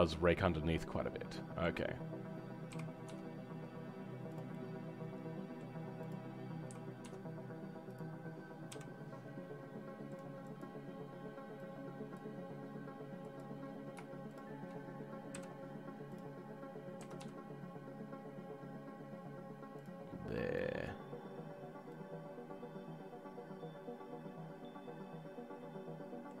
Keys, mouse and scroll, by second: 0.4-1.8 right drag, 0.4 middle click, 1.8-2.7 scroll up 4, 4.5-6.1 right drag, 4.5 middle click, 6.1 click, 10.4-14.3 drag, 16.1 ., 16.9 s, 21.6 scroll down 3, 21.9-26.4 middle drag.